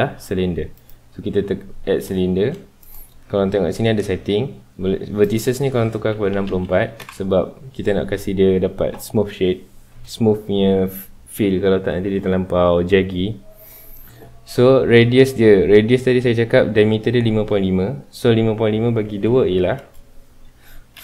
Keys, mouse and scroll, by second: 1.6-2.8 scroll up 2, 2.8-7.0 drag, 7.0 KP_Enter.